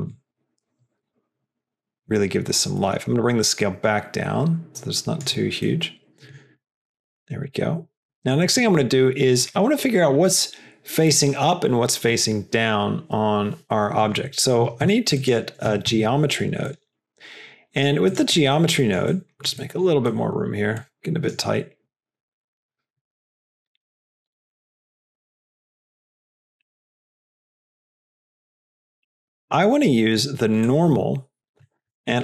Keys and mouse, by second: 5.8 middle click, 6.6 click, 7.3 click, 8.1 middle click, 8.3 click, 13.9 click, 14.3 middle click, 14.7 shift+a, 18.5 middle click, 19.0 click, 19.5 middle click, 20.1 middle click, 20.7 click, 21.6 middle click, 22.1 click, 22.9-24.1 middle drag, 24.4 click, 25.4 click, 26.1 click, 26.7 middle click, 27.2 middle click, 27.5 click, 28.1 middle click, 28.6 middle click, 29.3 middle drag, 29.8 click, 30.6-31.5 drag, 31.6 middle click, 31.9 shift+a.